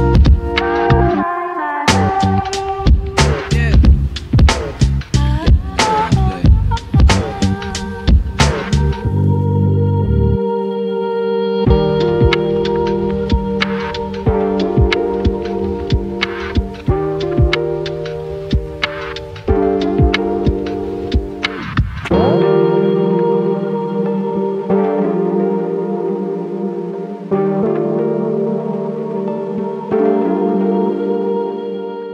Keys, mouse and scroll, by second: 0.8 click, 2.4 m, 2.8 right click, 4.4 click, 9.2 click, 10.0 right click, 11.5 click, 11.5 typing, 11.9 scroll down 1, 12.2 right click, 13.6 click, 18.8 right click, 19.4 click, 19.9 scroll up 1, 20.6 click, 25.1 right click, 25.6-27.9 drag, 31.9 right click.